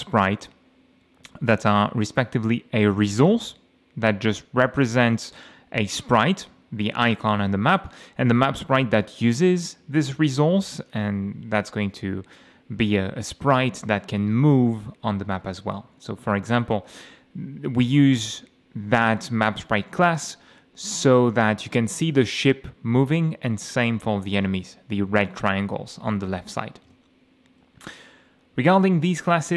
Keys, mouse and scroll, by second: 2.8 click, 7.9 click, 9.0 click, 10.8 click, 14.4 F5, 15.8 w, 16.9 w, 17.5 d, 18.1 m, 18.7 d, 20.1 a, 21.2 d, 23.9 a, 26.9 m, 27.5 F8.